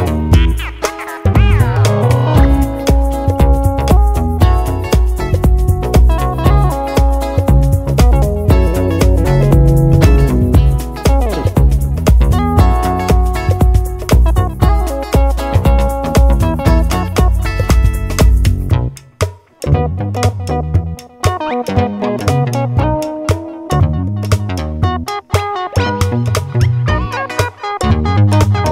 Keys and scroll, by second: 2.6 1, 3.4 Return, 14.7-17.0 typing, 22.3 super+c, 22.5 super+v.